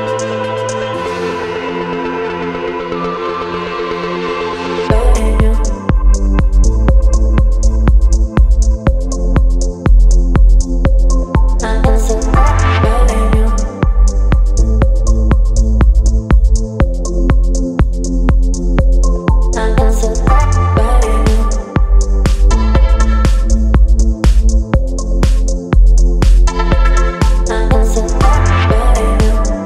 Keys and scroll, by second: 24.0 space.